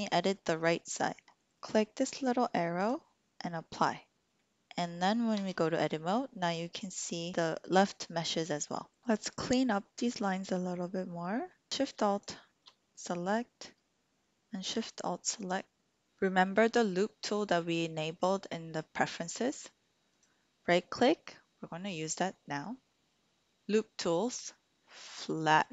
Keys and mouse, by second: 2.8-4.3 drag, 5.3 Tab, 6.4 click, 6.8 click, 20.2-25.6 right drag, 25.6 typing.